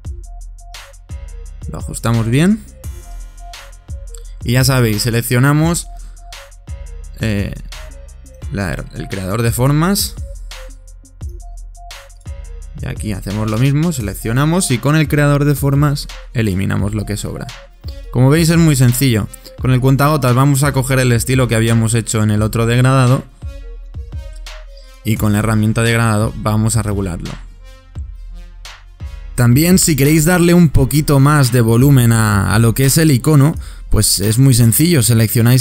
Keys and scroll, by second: 15.5 shift+m, 20.5 i.